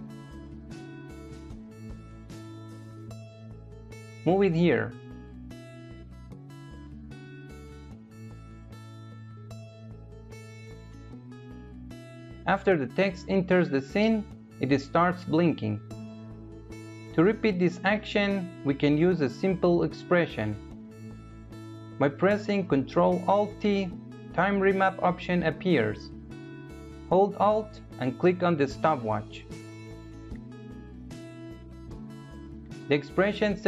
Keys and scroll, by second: 22.1 ctrl+alt+t.